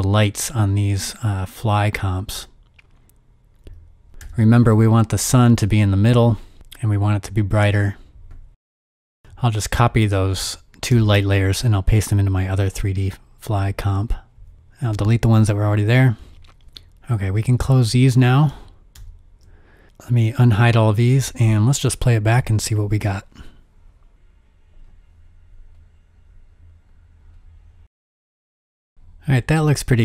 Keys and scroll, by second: 4.1-8.3 typing, 10.0 super+c, 10.9 super+c, 13.5 super+v, 14.3 super+v, 15.4 BackSpace, 16.7 BackSpace, 17.4 super+w, 22.3 0, 24.1 0, 29.3 space.